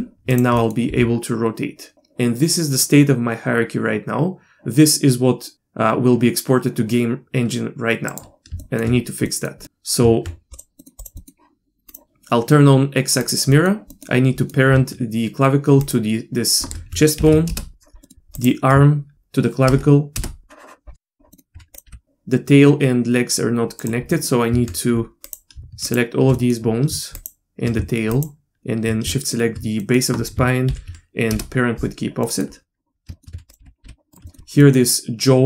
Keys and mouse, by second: 0.3 click, 0.6 middle click, 1.2 r, 8.6 shift+middle drag, 9.2 middle click, 10.0 Tab, 10.8 middle click, 11.0 click, 11.2 middle click, 11.9 drag, 13.2 click, 13.5 middle click, 14.0 middle click, 14.4 middle click, 15.8 shift+click, 17.2 ctrl+p, 18.0 middle click, 19.1 ctrl+p, 21.3 middle click, 21.5 Tab, 21.7 click, 21.9 r, 24.1 middle click, 24.7 Tab, 25.2 click, 25.9 shift+click, 26.3 middle click, 27.2 shift+click, 29.1 shift+middle click, 29.8 middle click, 30.9 ctrl+p, 32.3 middle click, 33.1 shift+middle click, 33.4 Tab, 33.5 click, 33.6 e, 33.8 r, 34.3 shift+middle drag, 34.6 middle drag.